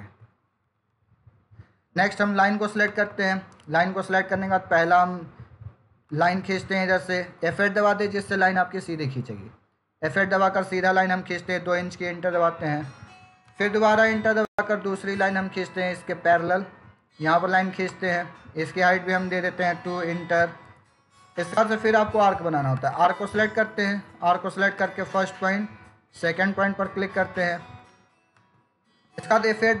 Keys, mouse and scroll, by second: 0.6 Escape, 2.3 click, 6.0 click, 7.9 F8, 17.7 click, 23.4 click, 28.2 click.